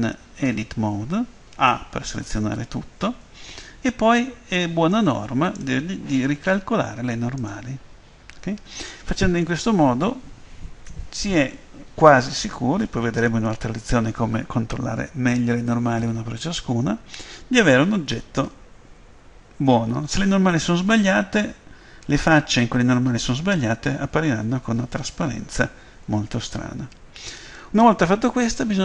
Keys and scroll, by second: 0.4 Tab, 1.6 a, 5.1 a.